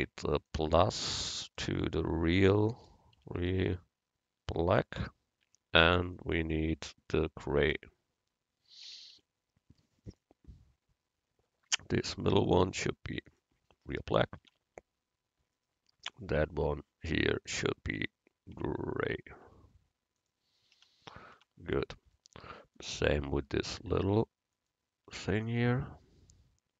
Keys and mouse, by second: 0.5-3.4 drag, 6.1-9.5 drag, 12.4-14.5 drag, 14.0 middle click, 14.0 right click, 14.5 Tab, 14.6 click, 20.9 Tab, 21.4 Tab, 24.6-26.5 drag, 25.2 Tab.